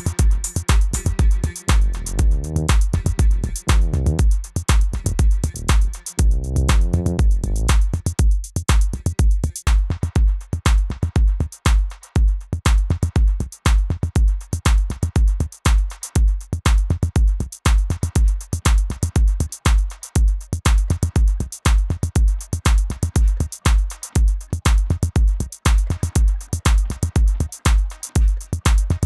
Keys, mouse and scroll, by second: 9.0 v, 10.1 click, 12.5 z, 13.1 click, 13.8 click, 14.6 z, 14.7 click, 15.5 click, 16.6 Down, 16.8 Right, 17.4 click, 17.8 shift+click, 18.6 Left, 19.0 click, 19.6 click, 20.2 z, 20.2 click, 20.8 z, 21.0 click, 21.7 Down, 22.1 click, 23.4 ctrl+t, 23.8 click, 24.2 Return, 24.4 Right, 24.7 Left, 25.1 click, 27.7 click, 27.8 Up, 28.3 click.